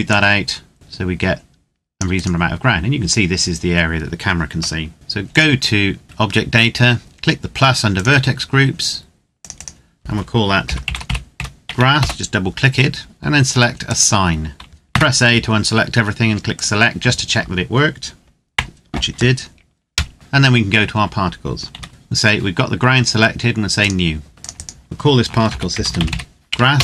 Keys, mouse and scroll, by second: 0.1 click, 2.0 right click, 5.2 click, 8.0 click, 10.6-11.1 typing, 11.7 Return, 13.6 click, 14.6 a, 16.3 click, 18.4 Tab, 19.7 KP_0, 20.1 click, 21.5 ctrl+s, 21.7 click, 23.6 click, 25.2-25.8 typing, 26.4 Return.